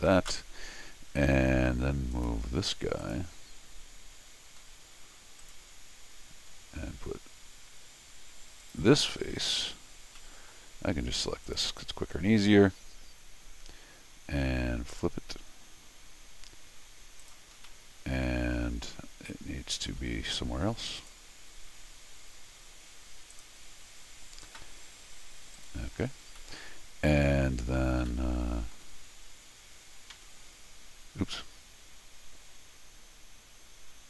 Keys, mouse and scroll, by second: 2.1 click, 3.0 click, 4.6 scroll down 1, 5.4 click, 8.6 click, 9.1 scroll down 1, 10.2 middle click, 11.4 click, 14.9 click, 17.2 click, 17.5 scroll down 1, 17.7-19.8 middle drag, 21.0 click, 23.3 click, 25.5 click, 26.4 middle click, 28.1 middle click, 30.1 Tab.